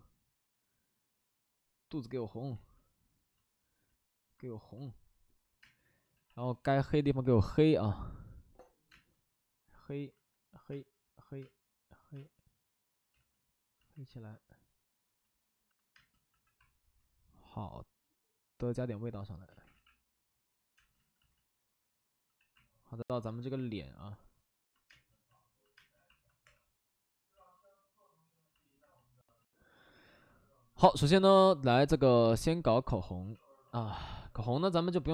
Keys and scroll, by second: 3.4 ctrl+z, 5.6 space, 6.1 c, 6.2 c, 8.4 c, 8.8 space, 10.0 ctrl+z, 10.7 space, 11.7 space, 12.1 space, 13.1 ctrl+z, 15.9 space, 16.2 c, 19.4 ctrl+z, 19.7 c, 20.7 space, 20.9 ctrl+z, 21.1 ctrl+z, 22.2 c, 24.8 space, 25.7 space, 26.4 3, 27.3 ctrl+z, 33.1 c, 33.6 c, 33.8 c.